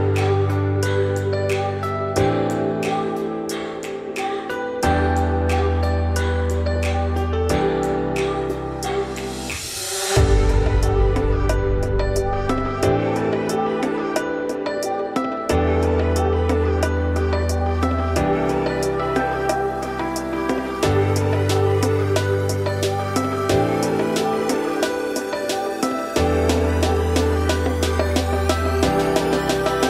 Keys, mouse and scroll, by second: 1.1-1.8 scroll up 3, 1.8-5.6 drag, 5.6-7.2 right drag, 7.2 click, 8.1 click, 8.8 click, 9.3-10.7 right drag, 10.7-11.2 middle drag, 11.2 click, 11.5 scroll down 3, 11.8-12.2 middle drag, 12.2 scroll down 3, 12.5-12.8 middle drag, 12.8-13.3 scroll up 2, 13.3-13.9 shift+middle drag, 13.9-14.3 scroll up 1, 14.3 shift+middle click, 15.2 click, 16.8-18.5 shift+drag, 18.5 middle drag, 18.8-19.5 scroll down 2, 19.5-20.6 middle drag, 20.6 scroll down 1, 20.8 `, 21.4 `, 21.9-22.3 shift+middle drag, 22.3 `, 22.8-23.3 scroll up 4, 23.3-23.7 scroll down 1, 23.7 `, 24.1-24.4 scroll up 2, 24.4 scroll down 3, 24.6 shift+middle drag, 24.8-26.6 scroll up 5, 26.6-27.8 shift+scroll up 5, 26.7 shift+middle drag, 27.8 click, 28.3 scroll down 4, 28.4-29.1 middle drag, 29.1-29.6 scroll down 10, 29.6-29.8 middle drag.